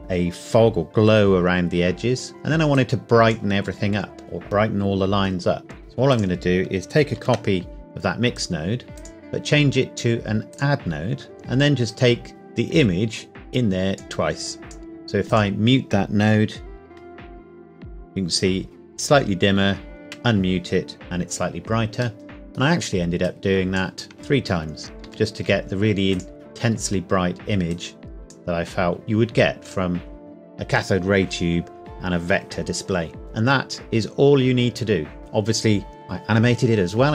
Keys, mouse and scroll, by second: 1.6 scroll down 1, 2.8 click, 6.1 click, 7.2 shift+d, 8.4 click, 11.9 click, 16.8 m, 20.0 m, 22.2 middle click, 23.2 click, 24.2 shift+d, 24.8 click, 25.0 shift+d, 26.1 click, 33.2-34.6 scroll up 1.